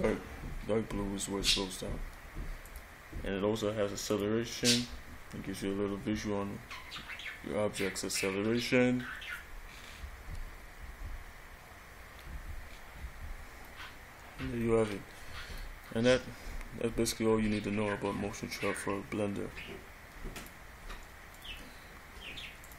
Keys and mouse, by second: 2.9 click.